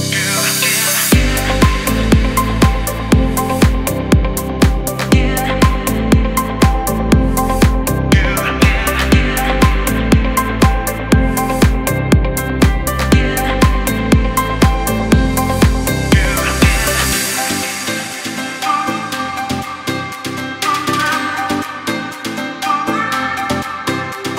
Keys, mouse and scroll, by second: 0.4 click, 1.1 alt+right click, 2.2 click, 9.8 click, 10.9 space, 11.0 click, 11.4 space, 11.7-22.6 drag, 16.7-17.2 typing.